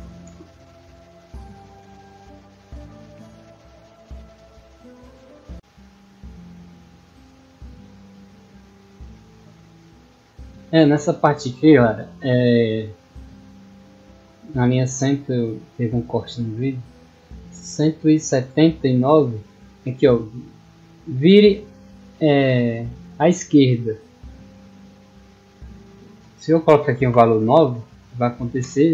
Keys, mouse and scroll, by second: 9.8 click, 16.2 middle click, 21.3 middle click, 23.4 middle click.